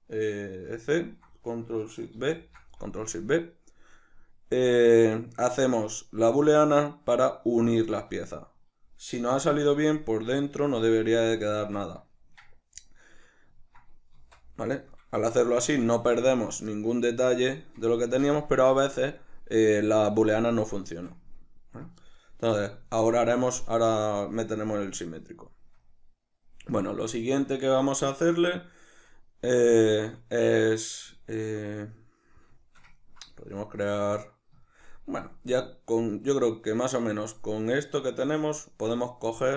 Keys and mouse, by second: 0.8 ctrl+shift+c, 2.2 ctrl+shift+b, 14.2 z.